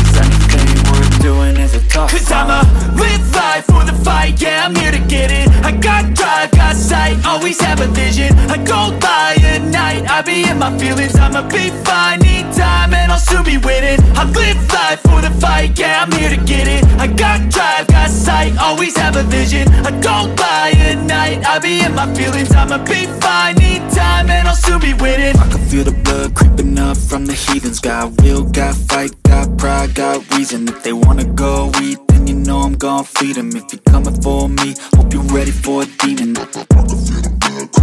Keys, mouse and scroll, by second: 2.7 click, 5.1 typing, 5.2 click, 6.2 click, 9.5 i, 10.0 click, 11.6 click, 18.3 click, 19.3 Tab, 20.6 click, 21.5 Tab, 25.2-29.4 drag, 29.4 i, 29.8 click, 30.9 click, 34.4 Tab.